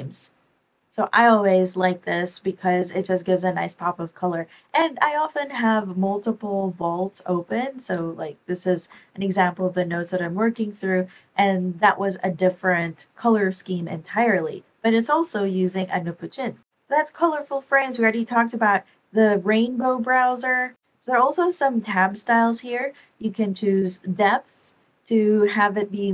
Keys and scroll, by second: 7.4 ctrl+alt+End, 7.9 ctrl+alt+Return, 9.4 ctrl+alt+Home, 9.9 ctrl+alt+Home.